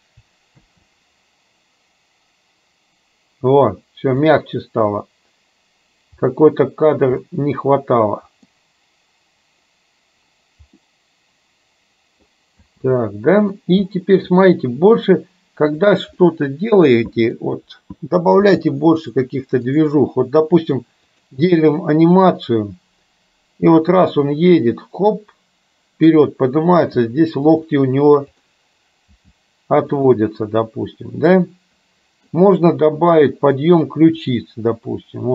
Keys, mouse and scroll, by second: 0.6 space, 4.4-5.0 middle drag, 6.4-7.0 middle drag, 7.3-8.6 middle drag, 10.9-12.3 middle drag, 12.6 space, 13.0-13.6 middle drag, 14.0 middle click, 15.8 click, 16.1-17.5 middle drag, 18.5 g, 21.3 click, 24.0-26.1 drag, 26.9 g, 28.5 click, 29.3 g, 31.3-32.4 middle drag, 33.4 middle click, 33.6 scroll up 1, 34.3 click.